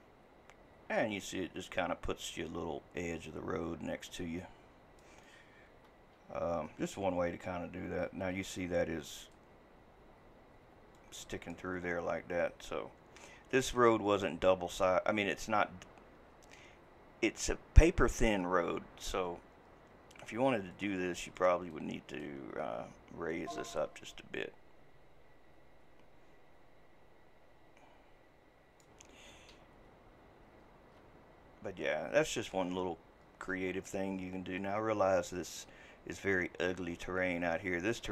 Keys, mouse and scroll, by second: 10.1 typing, 20.5-21.3 typing, 33.9 scroll, 33.9 ].